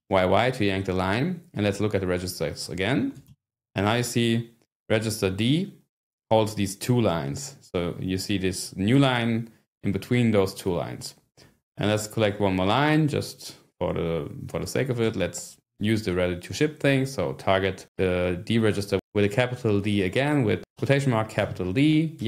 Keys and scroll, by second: 0.0 y, 2.5-3.7 typing, 12.2 Return, 15.0-15.8 scroll up 1, 20.7-22.2 typing.